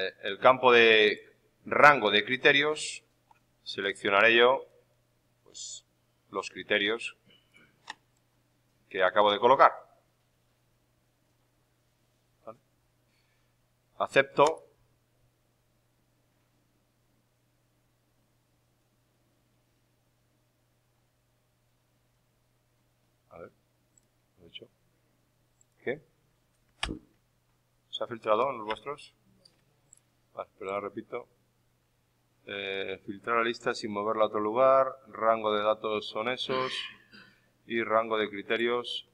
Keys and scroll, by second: 26.7 ctrl+Up.